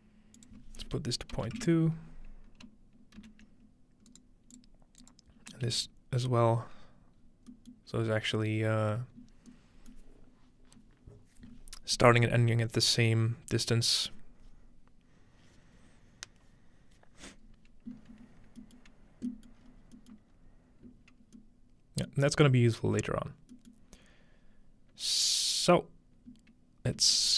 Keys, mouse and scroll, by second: 4.1 ctrl+right click, 4.6-6.4 drag, 5.7 ctrl+v, 7.2-7.9 scroll down 2, 7.9-8.8 scroll up 2, 9.2-10.9 scroll up 1, 10.9-13.2 scroll up 1, 17.9-19.6 scroll down 3, 18.8 middle click, 19.6-20.0 middle drag, 19.6 scroll up 2, 20.2-21.5 middle drag, 20.4 scroll up 1, 22.3-23.5 middle drag, 23.7-25.9 middle drag, 27.0 z.